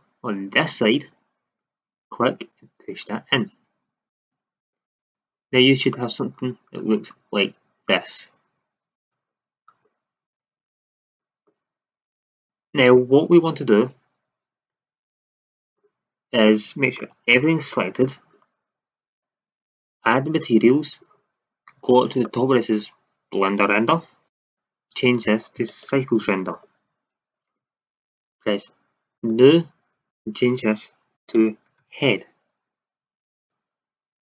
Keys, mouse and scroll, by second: 4.2-5.0 drag, 5.0 Tab, 5.3-5.9 drag, 6.1-6.6 middle drag, 9.2-11.0 middle drag, 10.3 Tab, 17.1 a, 17.7 a.